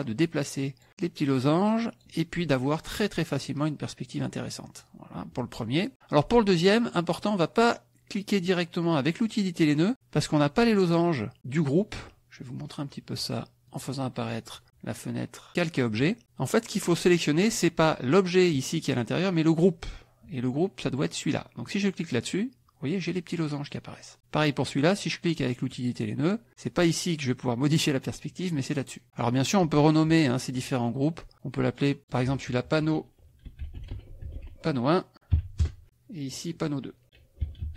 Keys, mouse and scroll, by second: 0.1-2.2 drag, 2.9-5.0 drag, 9.3 click, 13.7 click, 14.6 click, 22.0 click, 25.6 click, 28.8 click, 30.5 click, 31.3 click, 32.0-33.4 drag, 33.2-35.3 typing, 35.6 KP_Enter, 36.2 click, 37.2-37.7 typing.